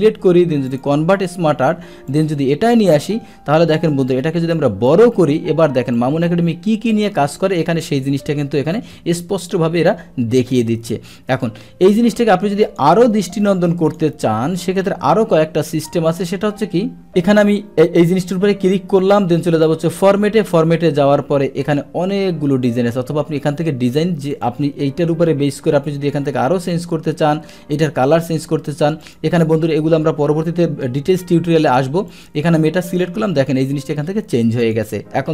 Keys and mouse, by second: 0.7 click, 2.2 click, 4.1 click, 5.9 click, 9.0 ctrl+m, 9.6 ctrl+m, 10.5 click, 11.3 click, 12.7 click, 13.9 click, 13.9 ctrl+x, 15.1 ctrl+v, 17.1 click, 19.5 click, 22.7 click, 24.3 click, 29.0 click, 32.1 click, 34.6 click.